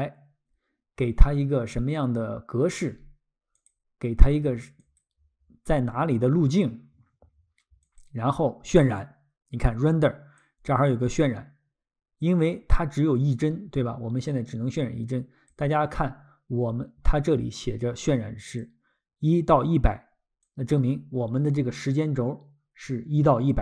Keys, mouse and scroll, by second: 3.5 click, 7.8 click, 10.4 click, 12.7 click, 17.6 click, 20.5 click, 21.5 click.